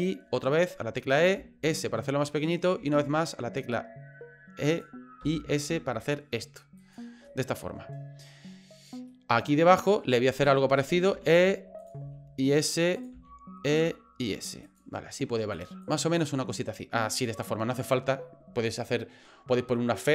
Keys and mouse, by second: 1.3 s, 2.8 e, 5.2 s, 7.3 middle click, 9.1 middle click, 9.7 right click, 11.1 e, 12.0 s, 13.1 e, 13.8 s, 15.6 click, 16.2-17.4 middle drag.